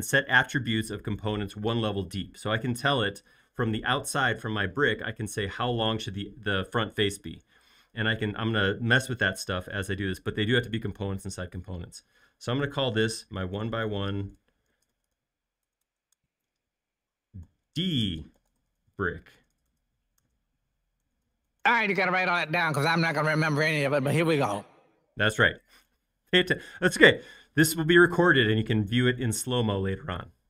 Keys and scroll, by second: 13.3-16.1 typing, 17.4-22.0 typing.